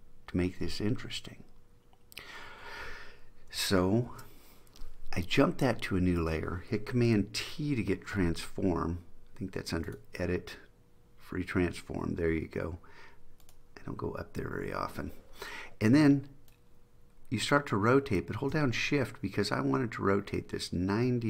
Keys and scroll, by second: 4.2 super+j, 7.6 super+t.